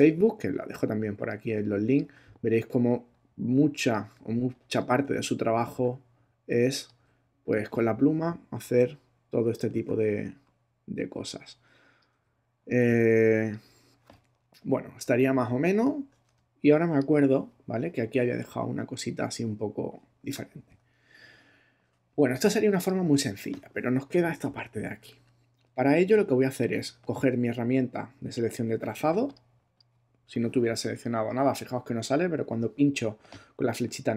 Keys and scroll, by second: 9.7 super+z, 15.1 super+-, 16.3 super+space, 17.1 space, 22.1 space.